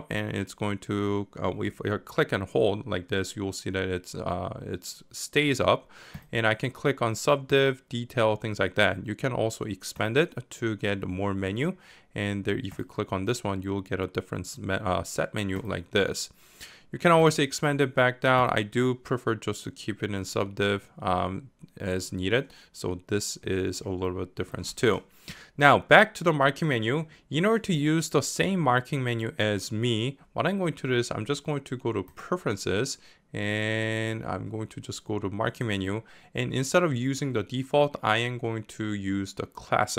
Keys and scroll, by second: 0.0-21.2 typing.